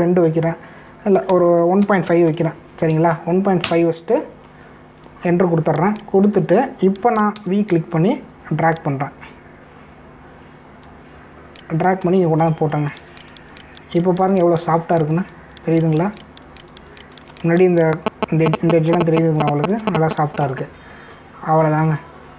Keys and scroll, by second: 0.8 2, 2.3-3.8 typing, 4.6 Return, 8.3 v, 13.0 space, 20.0 space.